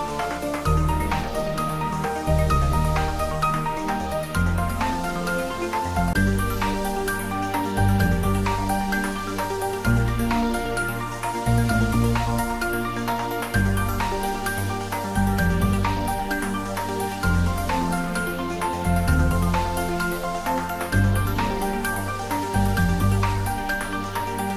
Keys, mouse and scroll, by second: 0.2 scroll down 1, 0.9-2.4 drag, 2.4-2.8 scroll up 1, 6.7-7.2 scroll up 1, 7.9 scroll up 1, 9.5-11.1 shift+drag, 11.5-13.4 scroll down 2, 13.6-15.4 scroll up 2, 15.7 middle click, 16.6-18.2 middle drag, 18.2 ctrl+z, 22.9 ctrl+z, 23.8 ctrl+z.